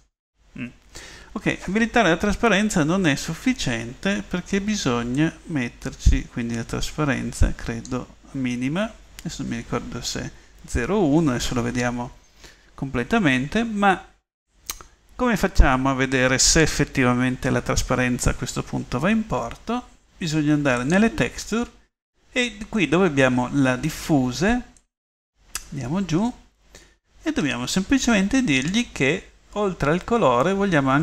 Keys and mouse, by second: 5.3 middle click, 25.3-30.7 middle drag.